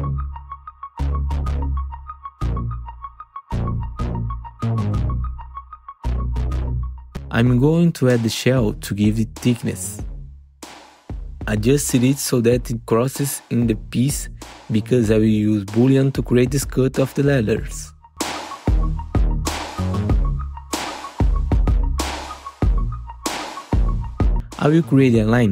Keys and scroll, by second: 0.9 r, 2.2 w, 15.2 F4, 16.2 F4, 17.4 F4, 18.2 F4, 24.7 w.